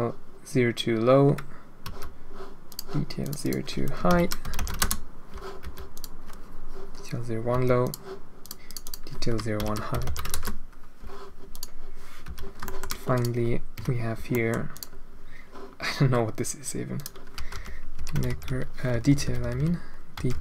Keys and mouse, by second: 1.8 h, 2.6 click, 3.2-4.8 drag, 5.6 h, 5.9 click, 7.5 h, 7.8 click, 8.4 click, 8.6-10.3 drag, 10.3-11.5 right drag, 10.5 Return, 12.2 h, 12.6 shift+middle click, 13.1 click, 13.7 KP_Decimal, 14.3 middle drag, 14.7-15.2 drag, 16.9-20.4 middle drag, 19.0 BackSpace, 19.2 BackSpace, 19.5 BackSpace.